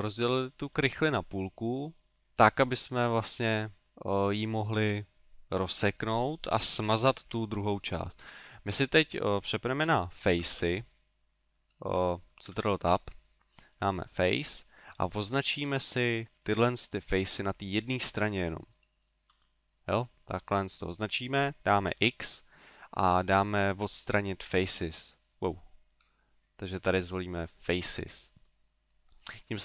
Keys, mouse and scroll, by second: 0.7 middle click, 2.7 middle click, 8.0 middle click, 8.6 middle click, 10.3 shift+Tab, 11.8 shift+Tab, 12.3 ctrl+Tab, 15.0 right click, 15.8 shift+right click, 16.3 shift+right click, 16.8 middle click, 17.9 shift+right click, 18.2 middle click, 19.0 shift+right click, 19.4 middle click, 28.4 middle click.